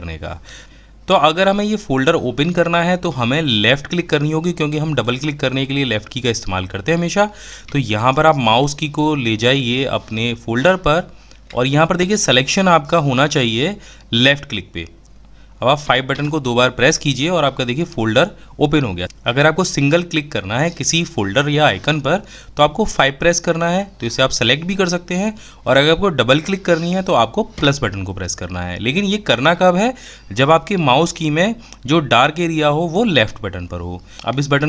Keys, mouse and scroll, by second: 12.5-14.5 drag.